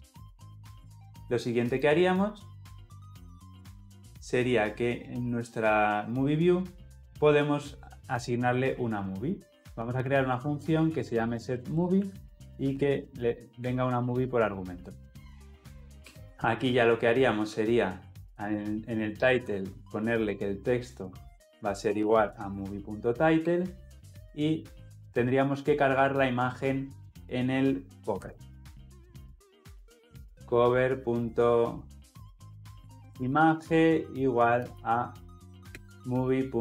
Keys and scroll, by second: 19.0 Return.